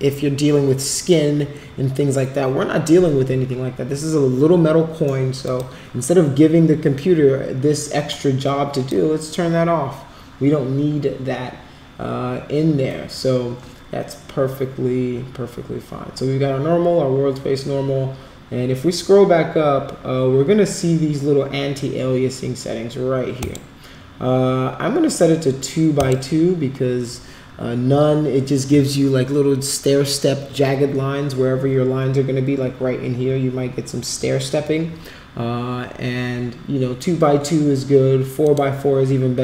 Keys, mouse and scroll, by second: 5.4 click, 8.1 click, 23.4 click, 25.9 click, 38.4 click.